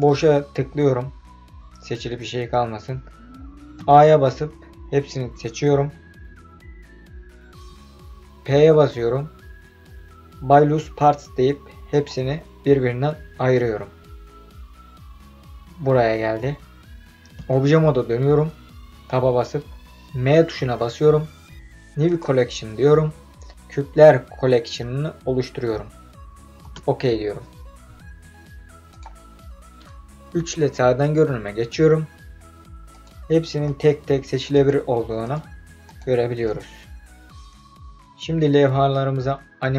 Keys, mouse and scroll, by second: 1.1-1.8 scroll down 2, 1.8 scroll up 1, 3.8 a, 8.5 p, 17.3 Tab, 20.3 m, 30.3 KP_3, 32.9 click, 33.6 click, 34.5 click, 35.2 click, 35.8 click, 36.4 click.